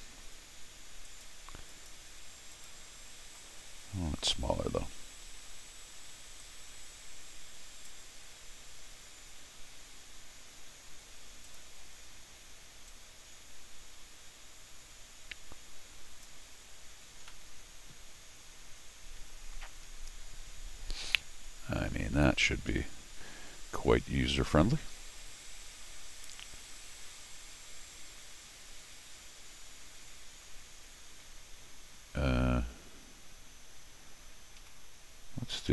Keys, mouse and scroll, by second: 1.0 click, 1.7 click, 2.5 click, 6.4-7.8 drag, 11.4 click, 12.9-16.2 drag, 17.3-22.1 middle drag, 22.7 Escape, 34.6 r.